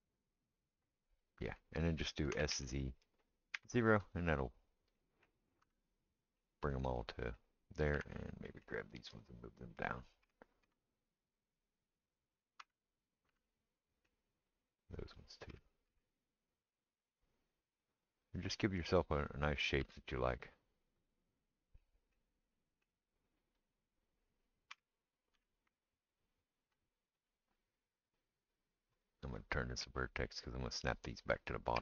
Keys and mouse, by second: 2.3 s, 4.2-9.2 middle drag, 5.6 Tab, 7.9 Tab, 9.2-12.4 drag, 10.2 g, 12.4-14.6 middle drag, 12.6 Tab, 13.3 Tab, 14.6-17.8 drag, 15.5 g, 17.8 middle click, 18.6-21.1 drag, 19.9 g, 21.1-23.5 middle drag, 23.5-31.8 drag, 24.7 g, 31.7 g.